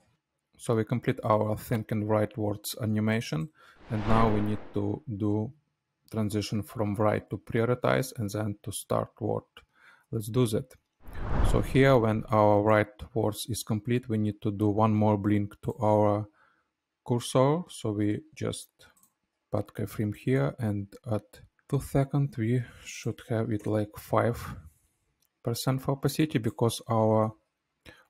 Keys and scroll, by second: 0.1 space, 23.4 KP_5, 23.7 Return, 27.1 t.